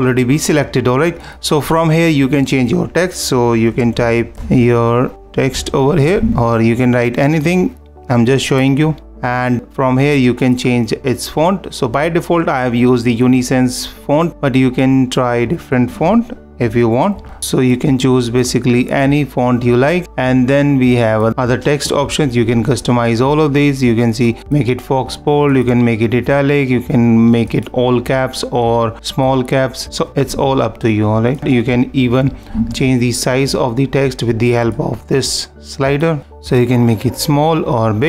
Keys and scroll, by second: 21.3 super+], 30.3 super+=, 36.2 -.